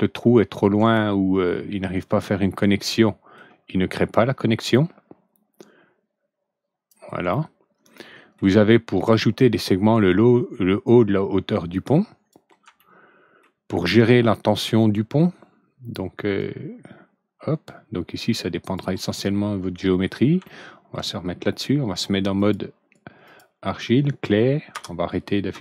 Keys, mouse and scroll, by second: 0.9-3.3 ctrl+alt+middle drag, 4.6-6.8 drag, 7.2-8.3 ctrl+alt+middle drag, 10.0-12.2 drag, 12.7 ctrl+alt+middle click, 16.3-18.7 drag, 19.1 ctrl+alt+middle click, 20.4 ctrl+alt+middle click, 22.3 click, 23.2 click, 24.7 ctrl+F4.